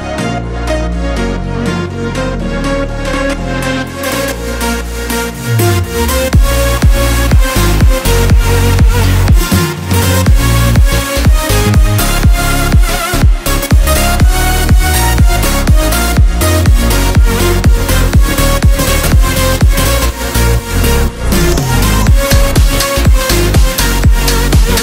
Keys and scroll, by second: 0.3 space, 1.1 o, 9.4 5, 9.6 Return, 11.1 1, 11.2 0, 11.3 Return, 12.7 space, 18.8 space, 24.2 5, 24.4 Return.